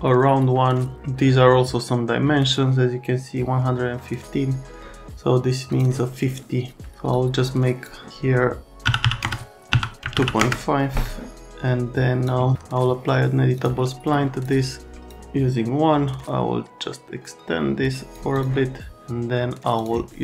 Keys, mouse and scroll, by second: 7.1 click, 8.8 KP_2, 9.0 KP_5, 9.2 KP_Enter, 10.0 KP_Decimal, 10.1 KP_5, 10.4 KP_Enter, 11.4 click, 13.6 click, 14.0 click, 15.0 click, 16.2 click, 18.3 click, 19.8 click.